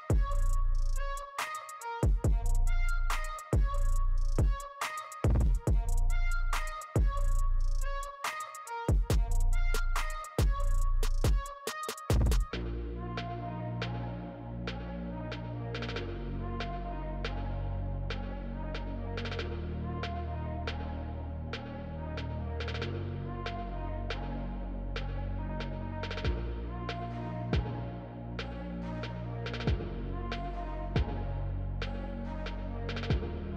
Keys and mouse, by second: 0.0 right click, 3.3 right click, 4.7 right click, 5.8 right click, 6.6 right click, 7.7 right click, 7.9 right click, 10.1 right click, 10.5 right click, 10.8 right click, 11.6 right click, 12.6 right click, 14.8 right click, 24.1 right click, 27.9 right click, 28.0 right click, 28.4 right click, 29.8 right click, 33.0 right click.